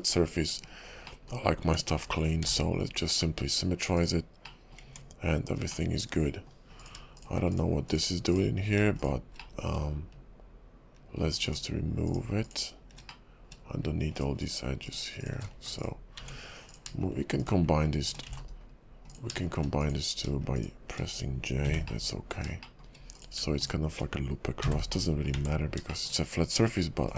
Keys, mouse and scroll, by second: 1.2 middle click, 1.6 Tab, 2.2 middle click, 2.4 alt+x, 3.9 click, 4.6 middle click, 4.8 Tab, 5.9 middle click, 6.8 click, 7.2 shift+click, 7.5 shift+click, 7.9 click, 8.3 click, 9.0 click, 9.5 middle click, 11.4 shift+click, 12.0 shift+click, 12.9 shift+click, 13.2 middle click, 14.1 shift+click, 14.4 shift+click, 14.8 shift+click, 15.2 shift+click, 15.5 x, 16.2 Tab, 16.7 click, 17.4 click, 19.8 click, 20.5 shift+click, 21.6 j, 22.0 middle click, 22.7 shift+middle click, 23.1 click, 23.6 shift+click, 24.6 j, 25.0 middle click, 25.3 Tab, 25.8 shift+click, 26.0 shift+middle click, 26.3-27.1 scroll up 2, 27.1 /.